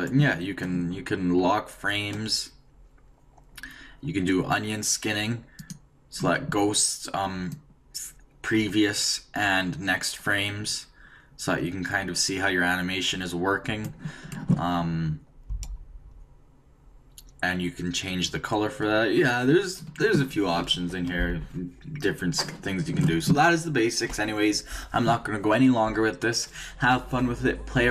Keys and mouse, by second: 7.4-9.4 drag, 21.1-27.9 drag.